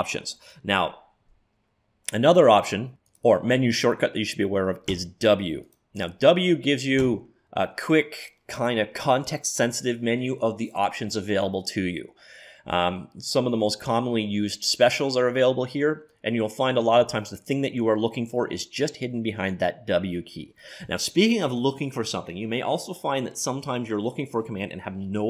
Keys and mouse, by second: 0.5-2.4 drag, 5.8 click, 7.0 w, 7.5 click, 17.1 w.